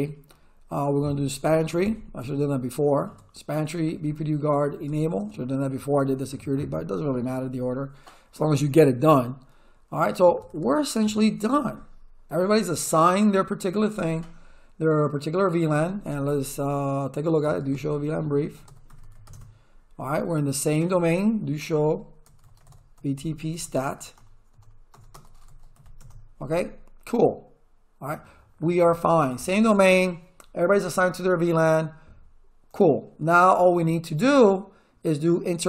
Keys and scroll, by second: 1.1-2.2 typing, 3.1 Tab, 3.8 b, 4.0 Tab, 4.6 e, 4.9 Tab, 5.2 Return, 10.0-11.0 typing, 17.1-19.7 typing, 21.2-26.2 typing.